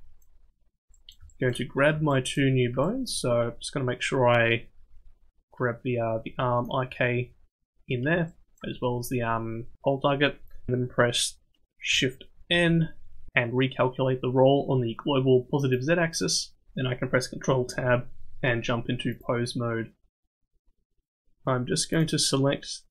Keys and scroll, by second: 12.5 shift+n, 17.7 ctrl+Tab.